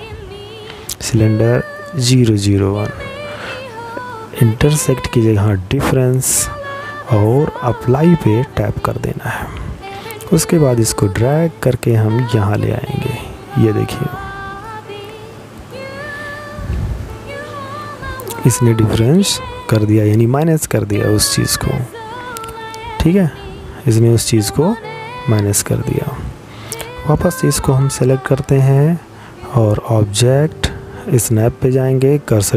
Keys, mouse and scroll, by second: 1.9 click, 5.6 click, 12.4 click, 13.4 middle click, 21.7 middle click, 24.7 right click.